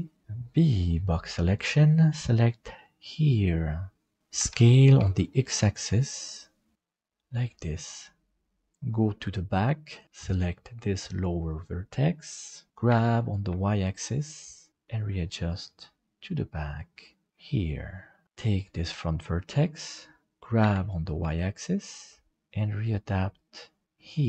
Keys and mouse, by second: 0.2 b, 4.4 s, 7.8 middle click, 9.9 right click, 12.2 middle click, 12.9 g, 17.3 middle click, 18.4 right click, 19.0 middle click, 20.6 g.